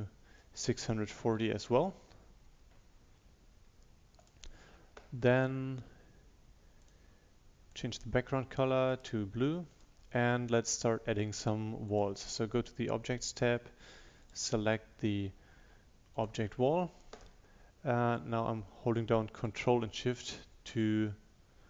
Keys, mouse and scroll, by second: 0.7-2.4 typing, 4.3-8.9 drag, 15.7 click, 18.2 ctrl+shift+click.